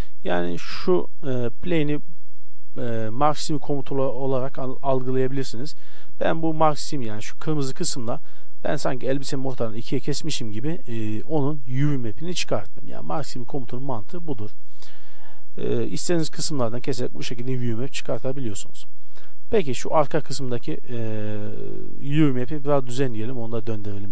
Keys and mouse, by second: 0.4 Tab, 0.6-1.6 right drag, 1.6 click, 2.8 Tab, 3.2 Tab, 4.0 z, 4.5 Tab, 4.8 z, 13.7 Tab, 14.3 x, 15.1 Tab, 19.6 click, 21.6-24.1 drag.